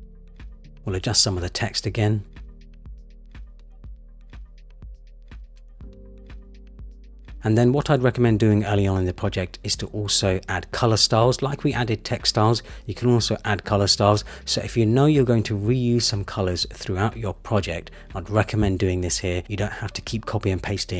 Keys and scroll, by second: 2.8 Return, 6.7 Return, 7.4 super+c, 9.3 super+v, 9.7 Return, 16.6 Return.